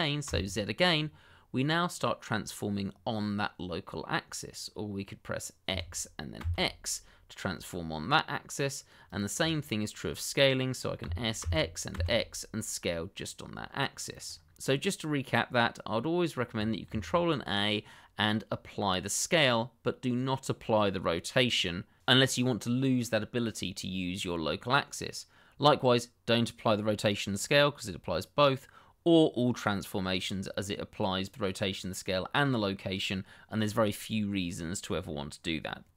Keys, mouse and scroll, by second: 0.2 z, 6.4 x, 9.0 click, 9.6 shift+middle click, 9.7 middle click, 11.0 s, 11.4 x, 14.1 click, 14.9 middle click, 16.8 ctrl+a.